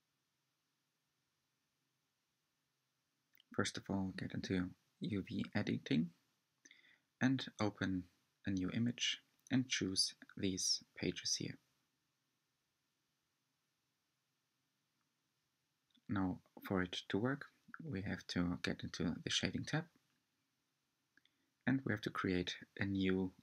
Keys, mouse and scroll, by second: 7.1-15.4 drag, 20.8-23.4 middle drag.